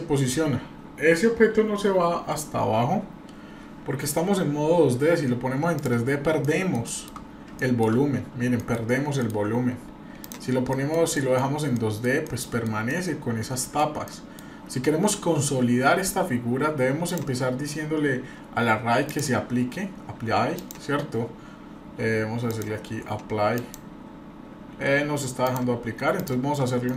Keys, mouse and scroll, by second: 5.7 click, 6.4-6.7 middle drag, 6.8-7.2 shift+middle drag, 7.2 scroll up 2, 7.6-7.9 shift+middle drag, 8.0-8.5 scroll up 1, 8.6 middle click, 9.2 middle drag, 10.2 click, 10.7 middle click, 11.1 middle click, 11.4 scroll down 1, 11.7 middle click, 12.3 middle click, 12.9-13.8 middle drag, 14.1 middle click, 14.9-15.2 scroll up 1, 15.5-16.2 scroll down 1, 17.0 click, 19.0-20.9 drag, 22.5-25.2 drag, 25.4 click, 26.1 drag.